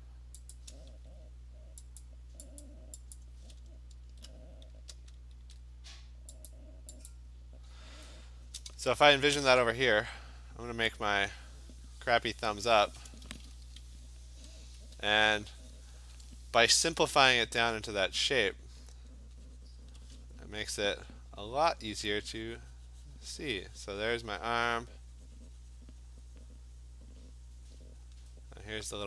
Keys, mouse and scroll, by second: 0.6 click, 2.0 click, 2.7 click, 3.2 click, 3.6-4.8 scroll, 5.4 ctrl+e, 6.5 click, 7.1 click, 8.0 scroll, 9.4 click, 11.7 click, 12.8 click, 14.6 alt+click, 16.0 click, 16.8 ], 16.9 ], 17.1 ], 17.8 click, 18.8 click, 19.2 click, 19.6 alt+click, 20.0 click, 21.0 alt+click, 21.1 alt+click, 21.8 click, 24.7 click, 27.0 click, 28.2 click.